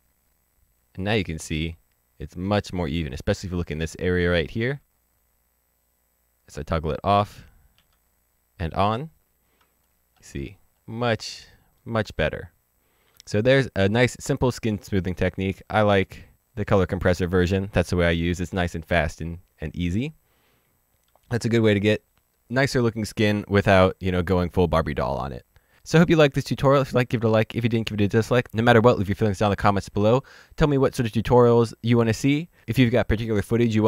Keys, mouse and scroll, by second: 0.0 ctrl+d, 0.4 ctrl+d, 5.6 ctrl+d, 7.7 ctrl+d, 9.6 ctrl+d, 9.7 scroll down 1, 11.2 middle click, 16.3 click.